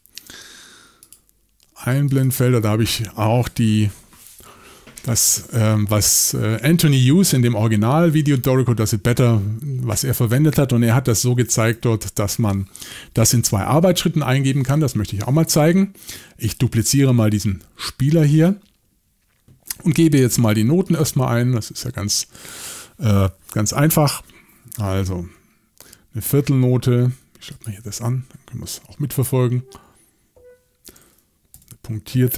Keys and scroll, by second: 11.2-11.7 typing, 24.0 Left, 31.5 ..